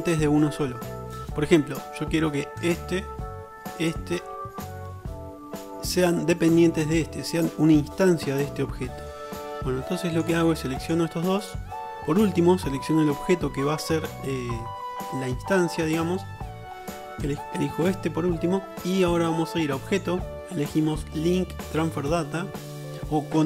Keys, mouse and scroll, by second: 2.8 click, 2.9-3.2 middle drag, 3.2-4.2 shift+drag, 4.2 middle drag, 4.4-5.2 shift+drag, 5.2-11.5 middle drag, 11.5 shift+click, 11.6-17.4 shift+middle drag, 17.4 shift+click, 17.8-19.9 middle drag, 19.9-23.2 right drag, 23.2-23.4 drag.